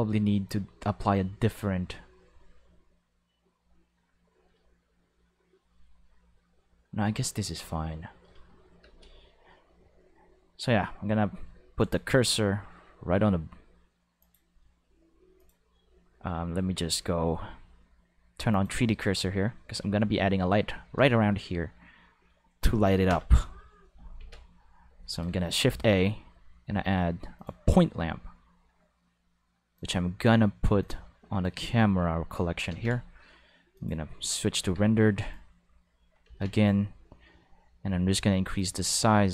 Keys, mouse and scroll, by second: 8.8 space, 9.0 5, 11.8 click, 14.2 click, 15.4 click, 18.5 click, 23.1 Home, 24.2 ctrl+5, 25.1 shift+a, 27.4 click, 29.8 click, 30.8-31.4 drag, 32.7 ctrl+5, 33.7 click, 34.6 alt+a, 34.7 5, 36.2 ctrl+5, 36.5 right click, 38.6-39.3 drag.